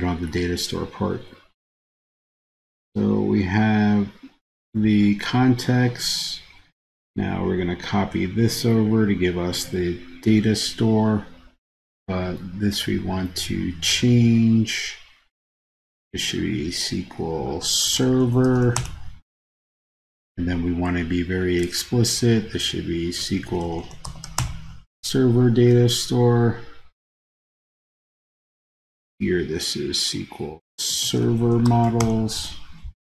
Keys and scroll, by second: 7.1 super+c, 9.6 super+v.